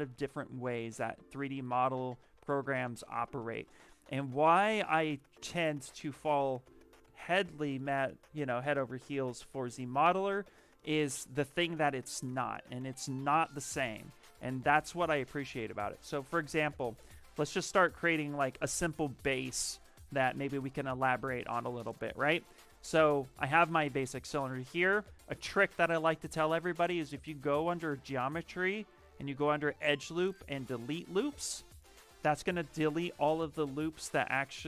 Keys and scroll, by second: 6.9 z, 7.3 m.